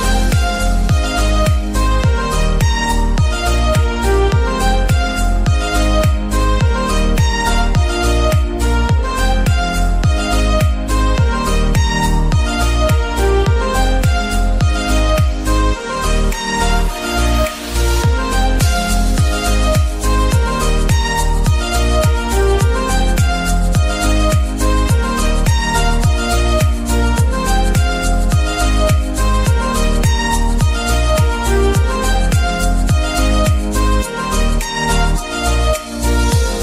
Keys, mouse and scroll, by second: 0.1 click, 0.7 g, 1.3 click, 1.9-2.2 scroll down 4, 2.2 middle click, 2.6 click, 3.7 shift+middle click, 4.4 shift+a, 5.1 click, 5.6 g, 6.4 click, 6.8 scroll up 2, 6.9 middle click, 7.8-8.4 scroll down 7, 8.4-10.3 shift+middle drag, 10.3 l, 10.3 s, 11.2 s, 13.5 click, 13.7 g, 15.1 click, 15.4-15.9 scroll up 5, 15.9 shift+middle click, 16.2 shift+g, 16.5 z, 17.5 click, 17.9 scroll down 2, 18.1 middle click, 18.6-18.9 scroll up 2, 18.9 middle click, 19.8 s, 21.6-22.1 scroll down 1, 22.1-22.5 scroll down 3, 22.5 middle click, 23.4-24.3 scroll up 4, 24.3-25.9 middle drag, 25.9 s, 26.8-28.1 middle drag, 28.1 s, 29.7 g, 31.5 scroll down 3, 31.7-32.8 middle drag, 32.8-33.2 scroll up 4, 33.2-35.2 middle drag, 35.2 s, 36.4-36.6 middle drag.